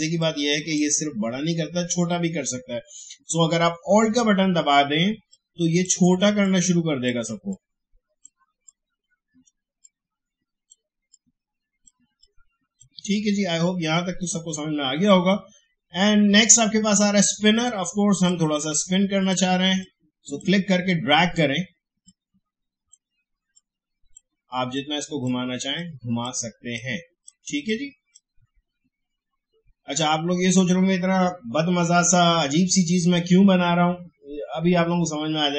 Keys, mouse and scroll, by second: 4.4-15.0 alt+drag, 15.0-30.6 drag.